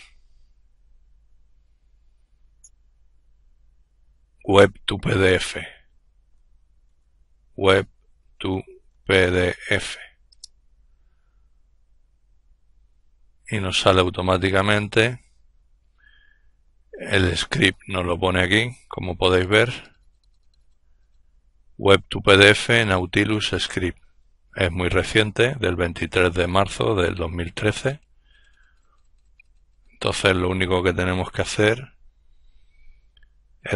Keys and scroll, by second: 10.1-11.8 typing.